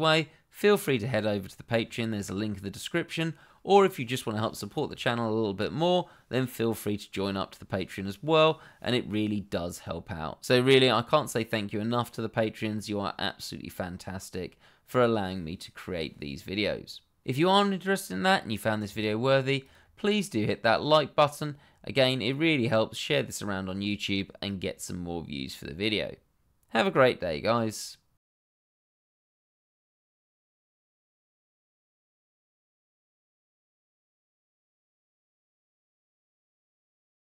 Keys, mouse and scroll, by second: 19.6 click.